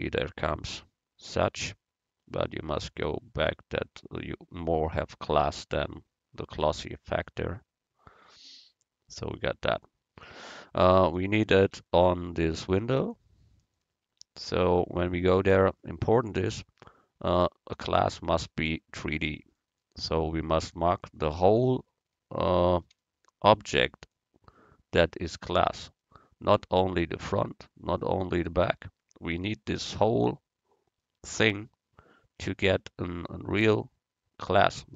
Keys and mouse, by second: 1.5-3.4 drag, 7.0-10.2 drag, 14.2 Tab, 18.8-20.4 drag, 22.5-24.6 right drag, 25.5-27.9 right drag, 29.5 z, 30.6 middle click.